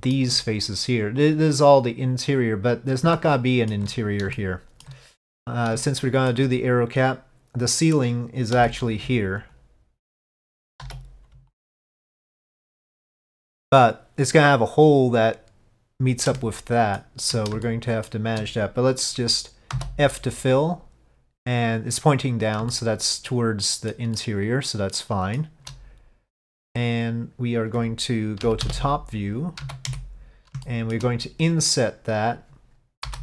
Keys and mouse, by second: 3.2 shift+middle click, 4.4 shift+middle click, 5.9 shift+middle click, 9.5 alt+click, 11.6 alt+click, 12.2 alt+click, 16.5 shift+middle click, 17.7 shift+middle click, 22.8-24.0 shift+middle drag, 24.2-25.5 shift+middle drag, 28.5 KP_5, 28.7 KP_7, 29.7 z, 30.7 shift+middle click.